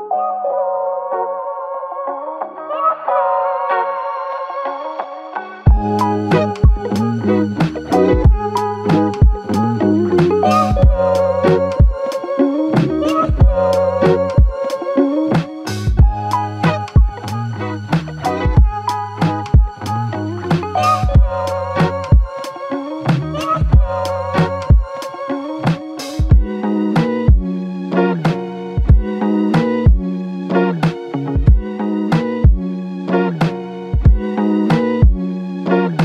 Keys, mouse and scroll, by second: 2.2 ctrl+click, 5.7 ctrl+click, 8.1 alt+click, 10.0 ctrl+click, 14.9 double click, 16.6 ctrl+click, 17.5 ctrl+click, 20.0 double click, 21.2 alt+click, 22.5 alt+l, 23.0 ctrl+click, 24.1 typing, 25.5 ctrl+click, 26.7 ctrl+click, 30.4 double click, 32.0 ctrl+click, 32.3 ctrl+double click, 33.0 ctrl+click, 34.2 double click, 34.8 ctrl+click.